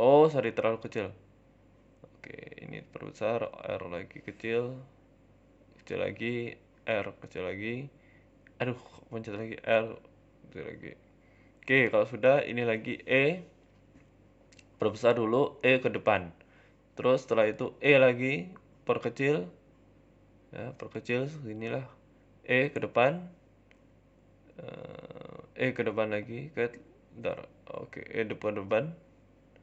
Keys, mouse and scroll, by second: 0.3 s, 2.1 click, 2.5 s, 3.3 ctrl+r, 3.7 s, 4.6 ctrl+r, 5.4 s, 6.2 ctrl+e, 6.7 ctrl+r, 7.1 s, 8.0 ctrl+e, 8.5 ctrl+r, 9.6 s, 10.8 Tab, 10.8 scroll down 5, 11.1 shift+middle click, 11.3-12.1 scroll up 3, 11.5 Tab, 12.1 shift+middle click, 12.4 click, 13.1 e, 13.6 s, 14.9 e, 16.0 shift+middle click, 16.8 w, 17.1 e, 17.5 s, 20.0 middle click, 20.6 s, 21.6 KP_1, 22.3 e, 23.7 shift+middle click, 25.9 ctrl+z, 28.8 middle click, 29.3 middle click.